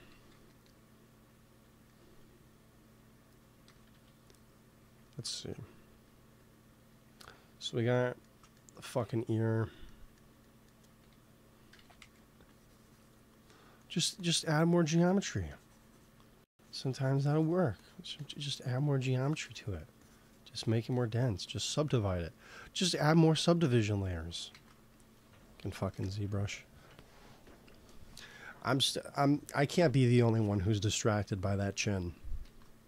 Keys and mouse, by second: 0.0 g, 0.2 f, 1.0-2.6 drag, 3.6 KP_1, 3.8 KP_3, 4.0 click, 5.3 f, 5.8 f, 6.3-8.0 drag, 11.7 shift+c, 11.9 f, 12.4-14.0 drag, 14.9 f, 18.6 f, 22.1-23.1 drag, 24.0-25.6 drag, 24.4 ctrl+s, 25.8 KP_1, 30.2 ctrl+s, 32.3 ctrl+s.